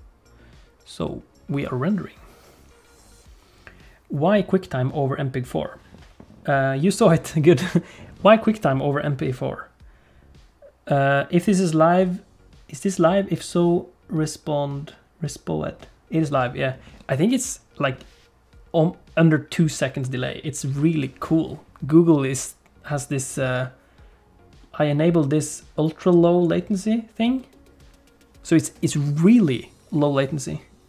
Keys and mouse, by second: 0.0 ctrl+F1.